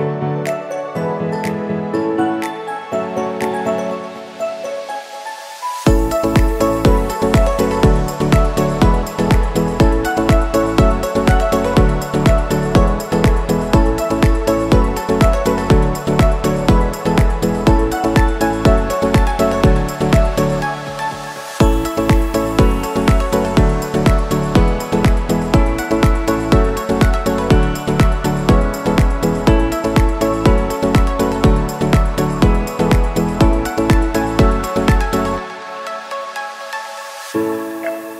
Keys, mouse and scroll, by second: 14.1 Return, 15.6 scroll down 1, 21.6 t, 24.1-30.9 drag, 34.9 click, 36.1-38.1 typing.